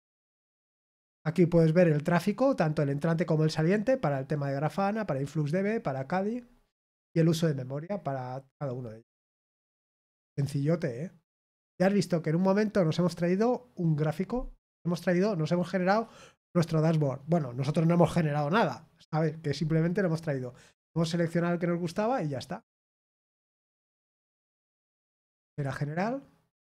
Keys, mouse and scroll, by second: 25.4 click.